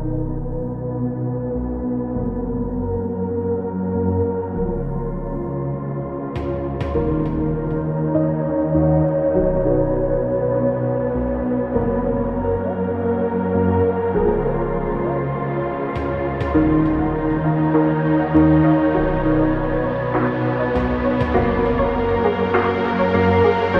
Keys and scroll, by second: 2.0 KP_Multiply, 3.3 KP_3, 4.0 Return, 9.9 KP_3, 10.1 KP_2, 10.6 KP_4, 14.4 KP_0, 15.2 KP_8.